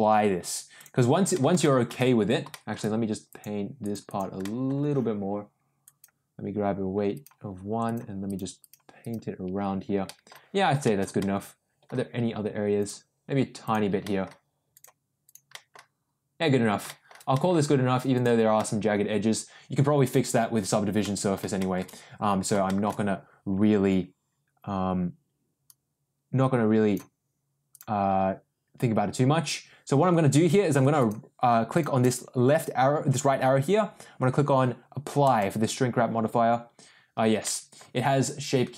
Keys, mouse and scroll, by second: 0.7 click, 1.3 middle click, 1.6 shift+middle click, 2.5 shift+middle click, 3.2 click, 3.8 click, 4.0 click, 4.4 middle click, 5.8 click, 7.1 click, 7.8 click, 8.2 click, 8.5 click, 8.9 click, 10.0 middle click, 10.8 shift+middle click, 11.2 middle click, 12.7 click, 13.6 click, 14.0 middle click, 14.7 click, 15.2 click, 15.5 middle click, 16.8 shift+middle click, 17.3 middle click, 18.1 click, 18.5-20.3 middle drag, 21.0 middle click, 21.5 shift+middle click, 22.6 shift+middle click, 25.6-26.9 drag, 27.7-30.0 drag, 30.9 click, 32.0-37.0 drag, 37.4 middle click.